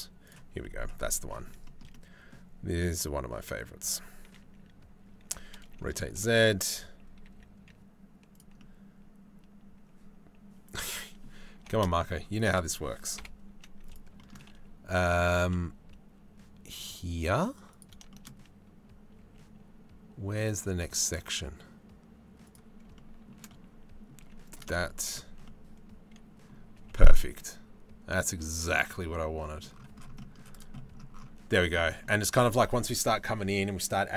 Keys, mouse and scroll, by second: 0.3 middle click, 0.9 middle click, 1.3 shift+middle click, 1.7 click, 5.0 r, 6.9 s, 8.2 click, 8.6-11.2 middle drag, 11.2 g, 12.8 KP_7, 13.1 z, 13.9 middle click, 15.0 g, 18.8 s, 20.3 g, 22.6 shift+middle click, 23.1 middle click, 23.8 z, 24.4 middle click, 25.1 middle click, 26.4 g, 28.5 middle click, 29.8 middle click, 30.1 middle click, 30.4 middle click, 31.1 middle click, 31.5 shift+middle click.